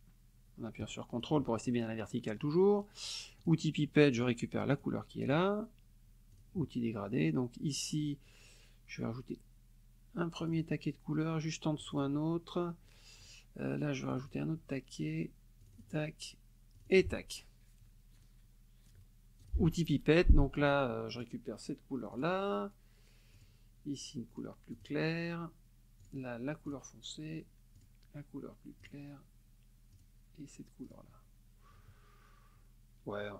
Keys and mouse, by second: 3.4 click, 4.7 click, 6.3 click, 10.4 click, 11.8 click, 14.1 click, 15.6 click, 16.7 click, 19.4 click, 21.1 click, 22.1 click, 23.4 click, 24.7 click, 26.0 click, 26.7 click, 27.8 click, 28.8 click, 29.9 click, 30.8 click.